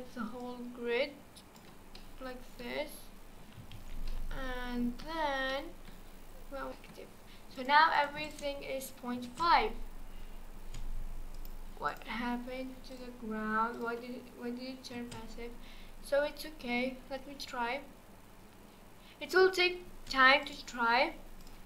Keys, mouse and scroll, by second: 0.4 shift+drag, 2.0 middle click, 2.9-3.7 scroll down 1, 3.7 alt+z, 4.1-5.0 middle drag, 5.0-5.5 scroll down 1, 5.5-6.7 middle drag, 6.7-7.2 scroll down 3, 7.2-7.6 scroll up 2, 7.6 click, 7.9 drag, 8.2 click, 8.6-9.2 scroll down 5, 9.2 space, 10.6 space, 11.4-12.0 drag, 12.9-14.2 drag, 14.2-14.9 scroll up 2, 14.9 space, 19.8 space, 20.4 click, 20.9-21.4 scroll up 3, 21.4 click.